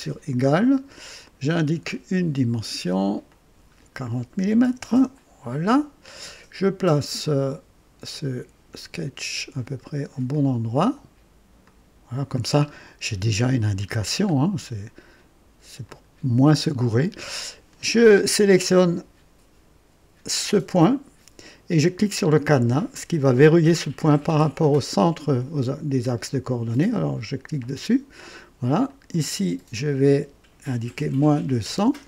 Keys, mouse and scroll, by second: 1.2 click, 3.2 click, 4.4 KP_4, 4.6 KP_0, 4.9 KP_Enter, 8.1-10.9 drag, 11.6-12.4 drag, 12.6 scroll up 1, 13.2 right click, 13.9 scroll down 1, 15.8 click, 27.5 click, 28.8 click, 30.9 KP_Subtract, 31.3 KP_2, 31.7 KP_0.